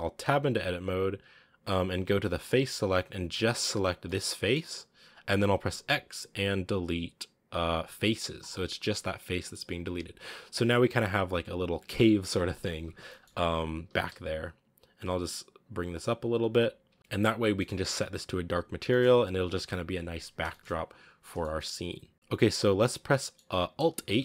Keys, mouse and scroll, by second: 0.1 Tab, 2.3 click, 3.1 right click, 3.9-4.9 middle drag, 4.9-6.7 scroll up 1, 6.7-8.3 scroll up 1, 8.3 x, 8.6-12.7 middle drag, 12.7 Tab, 12.9 middle click, 13.1 scroll up 2, 13.5 g, 16.7 a, 16.8 scroll down 6, 17.0 scroll up 3, 17.4 middle click, 17.6 scroll up 1, 18.4-18.8 scroll up 2, 18.8-20.0 shift+middle drag, 20.0-20.4 scroll up 1, 20.4-21.8 shift+middle drag, 21.8 scroll down 1, 22.1 shift+middle click, 22.8 scroll down 1, 23.1 middle click, 23.9 alt+h.